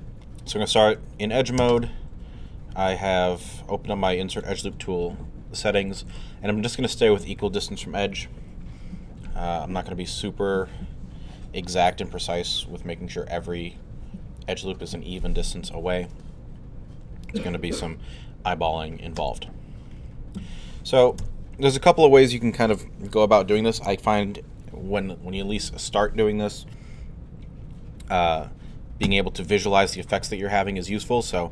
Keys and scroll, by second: 29.0 2.